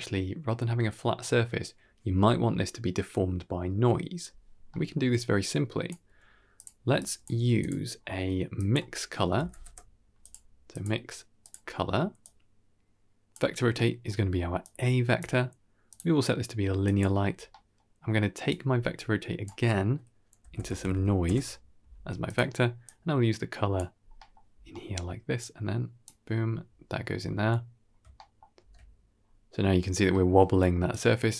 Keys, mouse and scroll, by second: 4.6 middle click, 5.3-5.8 drag, 5.9 g, 6.9 drag, 7.2 g, 7.8-8.4 scroll up 3, 8.4-10.2 drag, 10.6-11.4 drag, 12.1-13.2 drag, 13.6 middle click, 14.5-15.1 drag, 15.8-16.9 drag, 17.4 middle drag, 18.4-22.2 drag, 22.7-23.7 drag, 24.0 middle click, 24.6 middle click, 25.3-26.0 drag, 27.6-28.2 scroll up 2, 28.2 shift+middle drag, 28.5 shift+space, 29.1-29.5 scroll up 1, 30.0 middle click, 30.8-31.3 drag.